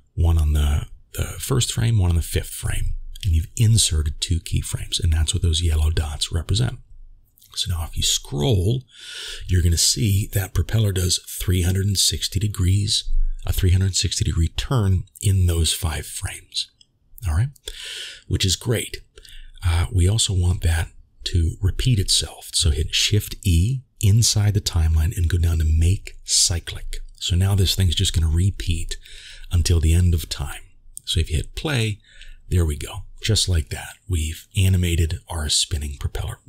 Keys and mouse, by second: 5.3-19.8 drag, 31.0 click, 33.1-33.7 middle drag.